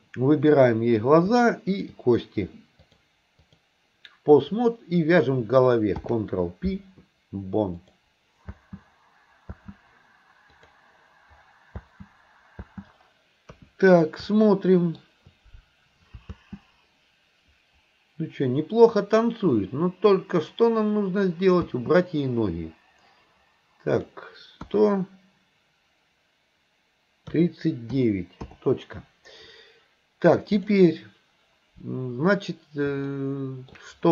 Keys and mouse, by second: 1.8 shift+click, 2.8 click, 4.5 click, 6.0 ctrl+p, 8.6 space, 9.6 space, 10.7 click, 11.8 space, 13.0 space, 13.6 KP_1, 14.4-15.0 shift+middle drag, 16.4 space, 21.7 space, 23.9 click, 33.2-33.8 shift+middle drag.